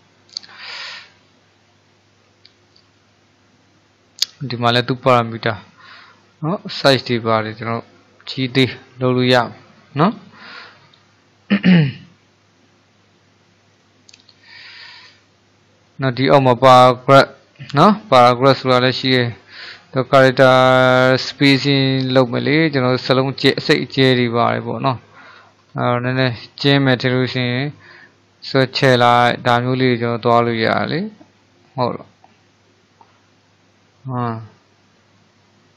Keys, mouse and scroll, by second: 6.3-9.4 drag, 13.8-18.2 drag, 22.0-24.7 drag, 24.7-25.7 shift+middle drag, 25.7-26.3 scroll down 3, 26.3-27.4 middle drag, 27.4-28.5 scroll up 2, 28.5-31.5 drag.